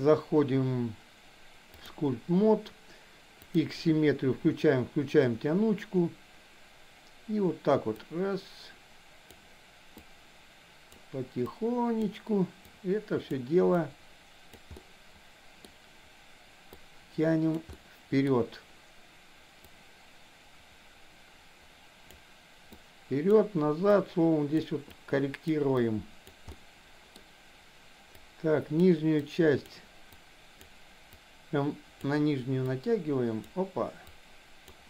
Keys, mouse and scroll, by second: 3.4 click, 7.9-9.3 drag, 9.9-11.1 drag, 11.6 click, 12.7 click, 13.8 click, 14.7-15.7 middle drag, 16.7 click, 17.7 middle click, 19.7-22.1 drag, 22.8 click, 23.9 click, 24.9 click, 25.8 click, 26.6 middle click, 28.2 click, 29.2 click, 30.2 click, 31.2 click, 32.7 click, 34.1 click.